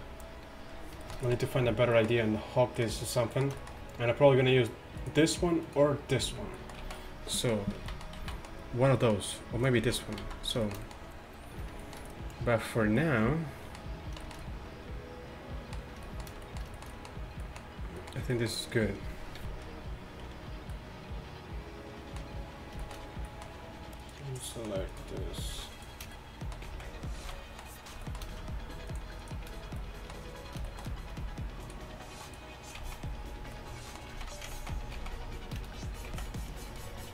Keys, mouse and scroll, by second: 5.2-6.8 right drag, 6.3 z, 6.9 z, 7.1-7.5 right drag, 7.8 z, 8.2 z, 9.9 z, 10.1 middle click, 10.3 z, 10.4 middle click, 10.7 middle click, 10.9 middle click, 14.0-15.2 drag, 19.4 a, 24.2-26.4 middle drag, 26.7 z, 27.3 z, 32.9 z, 34.2 z, 34.8 ctrl+z, 36.1 z.